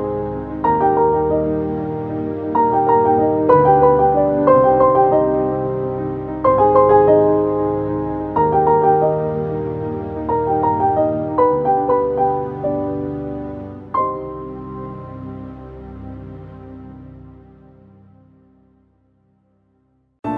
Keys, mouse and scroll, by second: 0.5 click, 6.2 click, 7.2-9.3 typing, 11.1 typing, 11.9-16.9 alt+drag, 16.6-17.4 typing, 19.7 click, 19.7 typing.